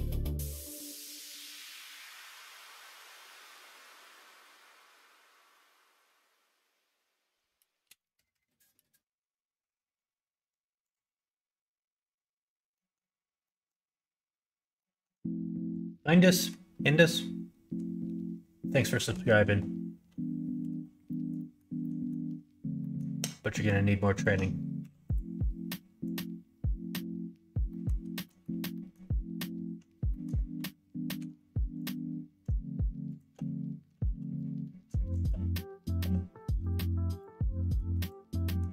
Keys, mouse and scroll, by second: 0.1 click, 0.6-1.8 middle drag, 2.2 middle click, 3.2-4.2 middle drag, 4.6 middle click, 5.6 middle click, 6.0 Tab, 6.3 middle click, 7.2 alt+z, 7.4 middle click, 7.9 middle click, 12.7 middle click, 13.4 middle click, 14.7 middle click, 15.4 shift+middle click, 16.2 middle click, 20.5 2, 21.0 middle click, 21.3 middle click, 21.8 middle click, 22.7 middle click, 24.1 alt+click, 24.7 q, 26.0 click, 27.6 middle click, 28.2 middle click, 28.7 middle click, 30.0 middle click, 31.1 3, 31.7 click, 33.1 shift+click, 34.0 ctrl+z, 34.3 middle click, 35.1 shift+click, 35.9 x, 37.1 click, 37.6 middle click, 37.9 click, 38.4 middle click.